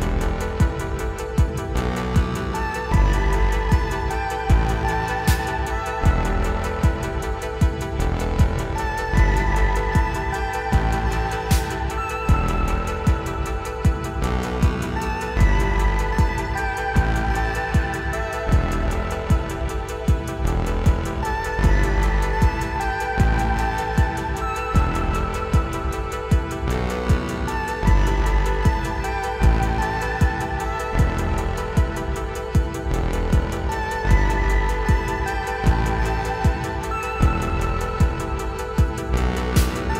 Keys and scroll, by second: 4.4 r, 6.4 r, 9.2 r, 13.0 x, 21.1 Tab, 22.9 ctrl+z, 33.5 Tab, 35.0 Tab, 37.9 BackSpace.